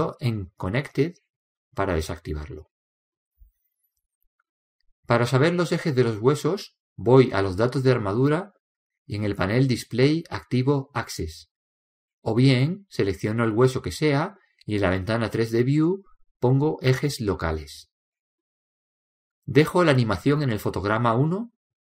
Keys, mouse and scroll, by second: 4.8-6.4 drag, 8.6-10.2 drag, 11.8-13.6 drag, 13.0-14.9 middle drag, 15.6-17.3 drag, 18.1-20.2 middle drag.